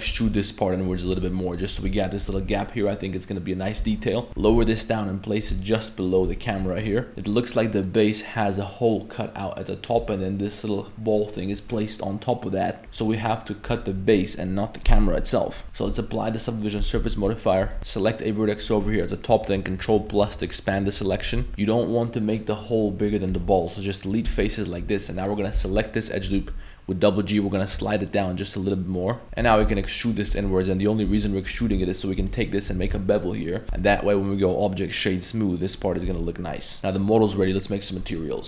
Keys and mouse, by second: 0.1 e, 1.1 x, 1.7 2, 2.1 alt+click, 2.4 ctrl+b, 3.8 Tab, 4.3 middle click, 4.3 shift+s, 4.3 g, 4.4 g, 6.4 middle drag, 6.8 shift+middle click, 7.1 g, 7.3 middle click, 7.8 middle click, 9.9 middle click, 12.8 z, 13.0 middle click, 15.4-15.7 middle drag, 15.6 Tab, 16.8 ctrl+a, 17.1 z, 17.3 middle drag, 17.7 Tab, 17.8 1, 19.3-20.1 ctrl+KP_Add, 21.0 ctrl+KP_Add, 21.4 z, 23.3 x, 24.3 z, 25.2 alt+right click, 25.6 z, 25.7 middle click, 26.2 g, 29.2-32.2 typing, 30.5 middle click, 31.9 alt+right click, 32.3 middle click, 32.8 ctrl+b, 33.7 Tab, 34.3-35.3 drag, 36.1 a, 36.7 middle drag.